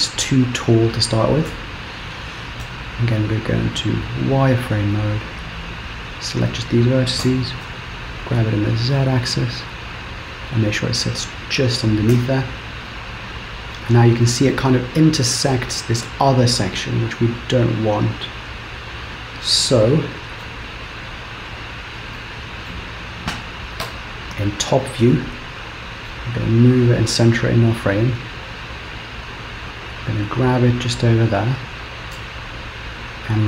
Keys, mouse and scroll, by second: 0.0 KP_1, 0.5 scroll up 3, 1.6 Tab, 2.6 z, 5.5 click, 7.2 g, 10.8-12.2 scroll down 1, 12.2 Tab, 13.0 middle click, 14.2-14.6 scroll down 1, 14.6 middle click, 16.0-16.7 scroll down 1, 16.7 middle click, 18.1 middle click, 18.8 middle click, 19.1 middle click, 20.5 KP_7, 21.1-21.9 scroll up 3, 21.9 scroll up 1, 22.1 Return, 22.6 Return, 22.6 middle click, 23.9 KP_7, 25.2 shift+middle click, 26.3-26.9 scroll up 2, 29.3 g, 32.2 Tab, 33.1 click.